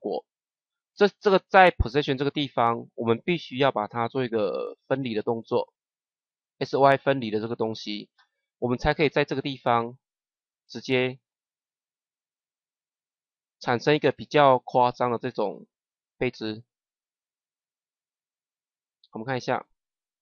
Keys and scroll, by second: 19.2 KP_0.